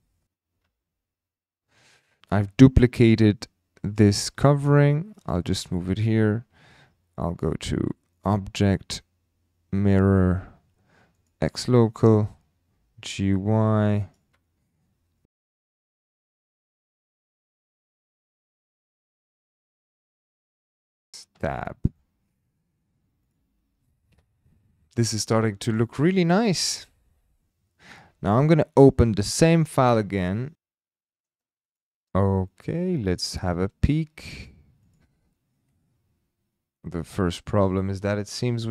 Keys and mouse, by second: 0.7 shift+d, 5.1 click, 8.2-12.1 drag, 11.3 typing, 12.7 g, 12.7 x, 14.0 click, 15.3 Tab, 15.5 click, 15.6-18.0 typing, 16.0 click, 16.4 click, 17.0 click, 17.5 click, 17.8 click, 18.4 click, 18.5 shift+middle click, 18.9 shift+middle click, 19.7-21.0 typing, 19.9 click, 20.0 click, 20.5 ctrl+z, 20.6 ctrl+z, 21.0 click, 21.4 Tab, 21.9-22.3 middle drag, 23.4 click, 27.5 ctrl+s, 30.5 shift+middle click, 31.7 click, 32.5 middle drag, 32.8 h, 33.9-34.3 shift+middle drag, 34.9 click, 35.7 KP_Decimal, 36.7-37.3 middle drag, 37.7 shift+middle drag.